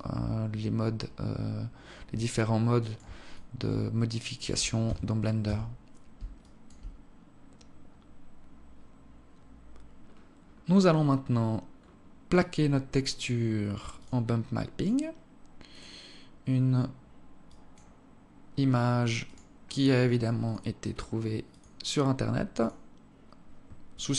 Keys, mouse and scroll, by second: 3.1 alt+click, 4.6 Tab, 5.2 Tab, 6.1 alt+click, 6.7-7.1 scroll down 5, 9.8-10.3 scroll up 2, 10.3-10.7 scroll down 1, 10.7-11.3 scroll down 5, 11.5-12.2 scroll up 3, 12.5-12.9 scroll up 4, 12.9 click, 13.7 click, 14.5 click, 19.0 click, 22.6 click.